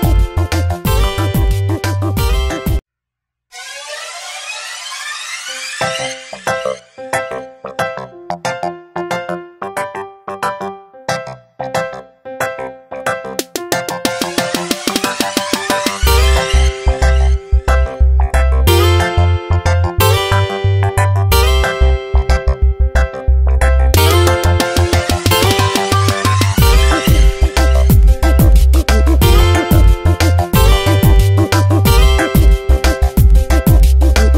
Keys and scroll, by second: 1.5 space, 8.3 v, 10.2 ctrl+z, 13.1 ctrl+shift+], 15.6 ctrl+t, 21.0 Return, 26.5 space, 28.9 ctrl+j, 29.3 v, 31.2 Delete.